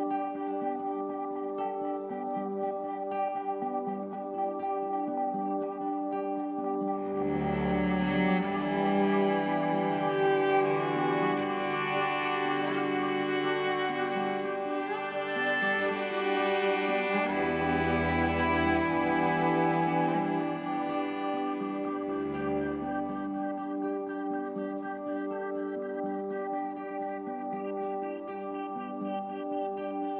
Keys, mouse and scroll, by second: 0.3-1.8 drag, 1.8 shift+a, 13.1-14.1 drag, 14.1-16.1 middle drag, 16.1 click, 17.0-19.3 middle drag, 19.3-25.2 drag, 29.7 click.